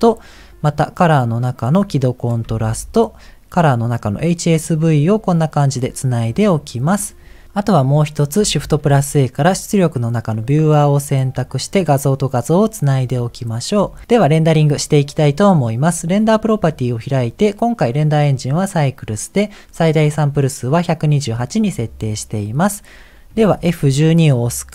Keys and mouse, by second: 2.6 shift+a, 5.2 middle click, 8.6 shift+a, 11.8 click, 16.1 click, 23.6 ctrl+s.